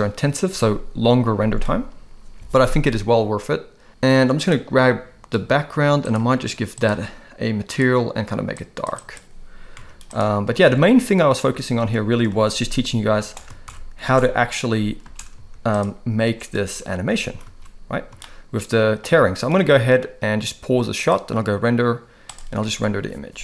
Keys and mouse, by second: 4.3 click, 6.9-8.0 drag, 9.8 z, 10.7 alt+a, 11.6 ctrl+s, 12.3 space, 13.2 space, 13.7 shift+Left, 14.0 space, 15.4 space, 15.4 z, 16.2 space, 16.6 space, 17.3 ctrl+s, 17.6 ctrl+s, 18.3-19.0 shift+drag, 21.0-23.4 drag.